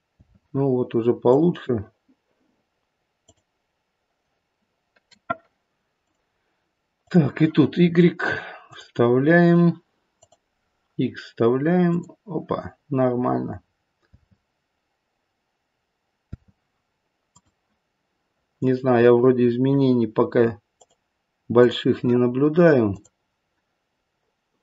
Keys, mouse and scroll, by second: 0.2 space, 1.3 click, 6.0 click, 6.9 click, 8.7 click, 10.1 click, 11.8 click, 14.1 space, 16.2 space, 17.3 click, 20.7 click, 21.6 click, 22.8 click.